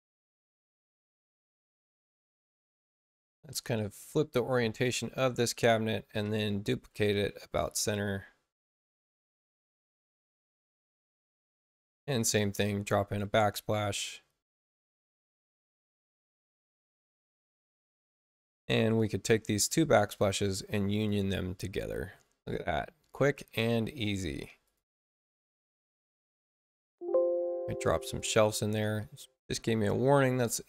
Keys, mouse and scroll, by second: 0.4 space, 1.2 space, 1.7 click, 4.5 click, 6.2 ctrl+alt+c, 8.5 click, 12.2 click, 14.5 click, 15.0 click, 16.6 click, 20.0 click, 20.8 click, 24.0 space, 24.6 click, 25.4 click, 28.1 click.